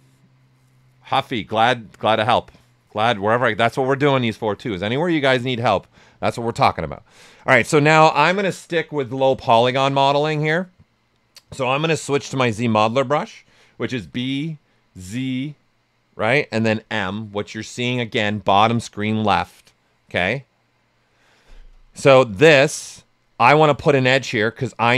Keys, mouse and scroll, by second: 7.1 alt+right click, 7.7-8.7 typing, 7.8 alt+right click, 12.0 right click, 13.9-15.4 typing, 16.7 m, 21.8 right click.